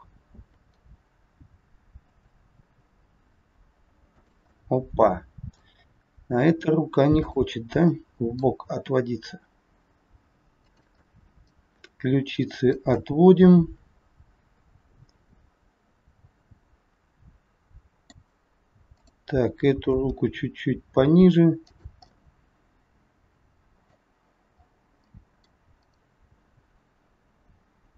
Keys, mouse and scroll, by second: 2.7 r, 4.5 middle click, 5.9 scroll up 2, 7.2 click, 7.9 middle click, 8.7 r, 11.0 middle click, 12.9 middle click, 12.9 scroll up 1, 18.9 click, 19.8 g, 22.0 middle click, 24.5 scroll down 2, 25.0 middle click, 25.8 click, 27.8 g.